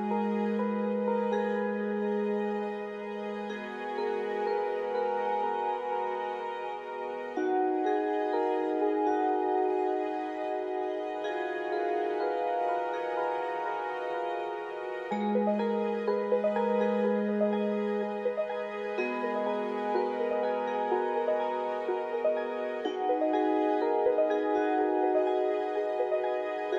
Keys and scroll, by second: 0.0 1, 1.5 2, 1.7 1, 3.2-5.2 typing, 8.7 f, 14.9 i, 16.1 BackSpace, 16.1 Return, 17.8 f, 18.1 g, 23.3 ctrl+z, 24.6 alt+x, 25.3 1.